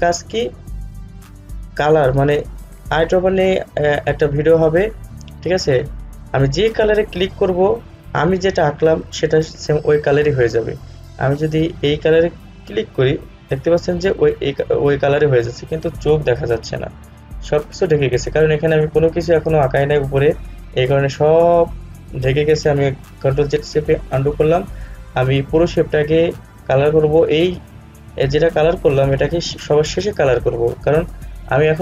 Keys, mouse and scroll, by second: 12.7 click.